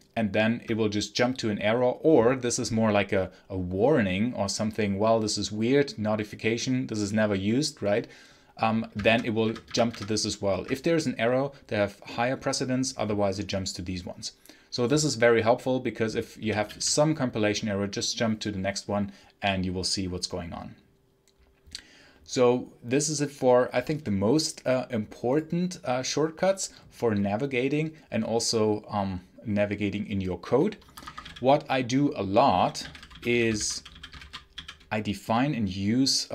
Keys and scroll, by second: 8.9 F2, 9.3 F2, 9.5 F2, 9.8 F2, 16.3 j, 30.7 Escape, 30.8-34.9 typing.